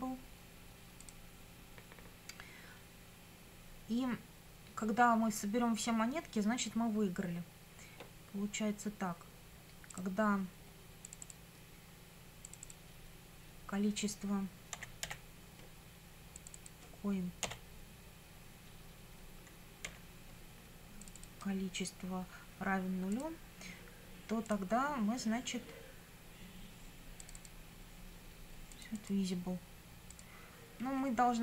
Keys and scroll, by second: 14.7 c, 15.0 o, 17.4 ., 19.9 c.